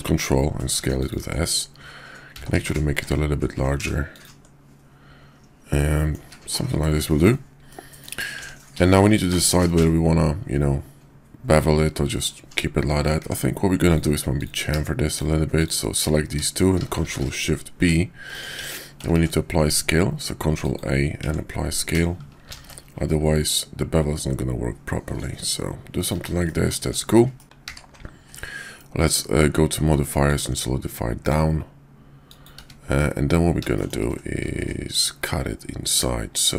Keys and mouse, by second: 2.3 s, 5.7-6.1 middle drag, 6.2 `, 6.8-7.2 middle drag, 7.6-8.0 middle drag, 8.3 Tab, 9.3-13.1 middle drag, 13.2 Tab, 15.0 shift+click, 15.5 shift+click, 16.9 ctrl+shift+b, 18.6 Tab, 19.0 ctrl+a, 21.2 Tab, 22.4 ctrl+shift+b, 26.4 middle click, 26.8 Tab, 27.4 click, 27.6 q, 32.5 `, 33.7 shift+drag.